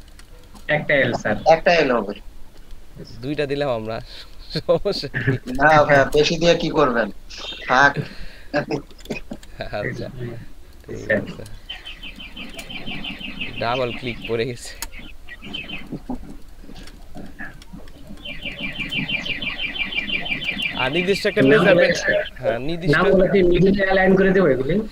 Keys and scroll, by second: 0.0 ctrl+space, 1.0 ctrl+alt+space, 9.0-9.4 typing, 11.7 ctrl+space, 14.8 Delete, 16.6 ctrl+space, 17.3 ctrl+space, 17.9 ctrl+space.